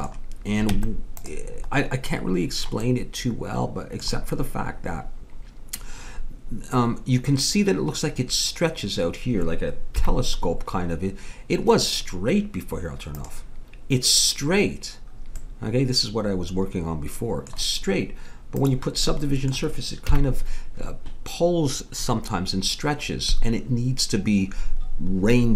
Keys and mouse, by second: 0.7 Tab, 10.0 KP_1, 13.1-14.8 drag, 15.4-16.9 middle drag, 18.6-20.1 drag, 20.1 KP_1, 20.3 middle click.